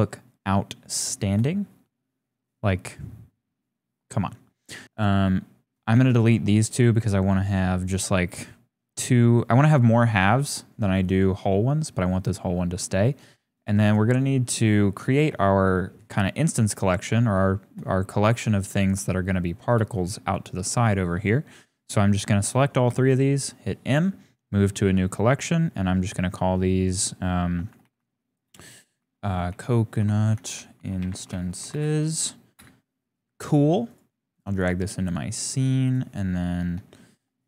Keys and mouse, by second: 1.6 shift+click, 4.8 x, 5.8 click, 5.9 x, 11.3 g, 13.8 shift+click, 14.9 click, 15.4-16.4 shift+drag, 17.2 shift+click, 18.2 g, 19.0 shift+click, 19.9 shift+click, 20.5 shift+click, 22.9 m, 32.6 typing, 35.2-35.9 typing, 36.8 shift+click.